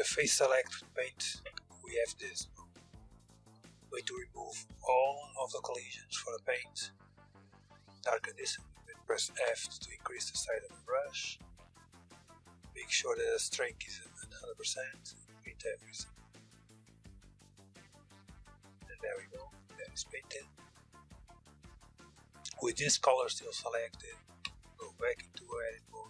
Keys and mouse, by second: 2.4-8.7 drag, 8.9 f, 11.0-15.5 drag, 15.8-21.1 middle drag, 23.9 Tab, 24.6-26.0 drag.